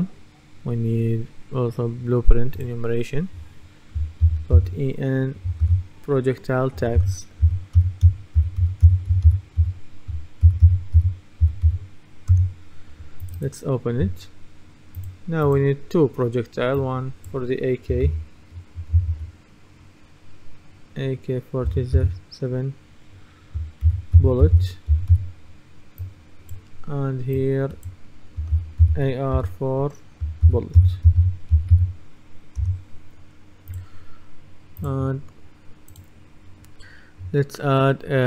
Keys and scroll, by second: 4.3 shift+e, 5.7 shift+-, 6.8-12.2 typing, 12.4 Return, 18.1 shift+a, 21.7 4, 23.6-25.7 typing, 28.6 shift+a, 29.4 4, 30.5-32.3 typing, 32.7 Return.